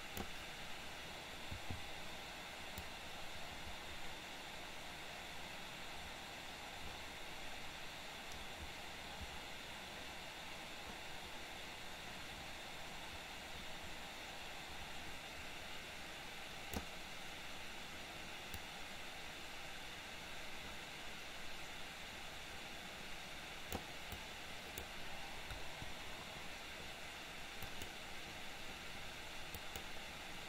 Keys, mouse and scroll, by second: 3.0-17.0 drag, 18.7-24.0 drag, 24.2-24.9 drag, 25.6 Delete, 27.7 click, 29.7 click.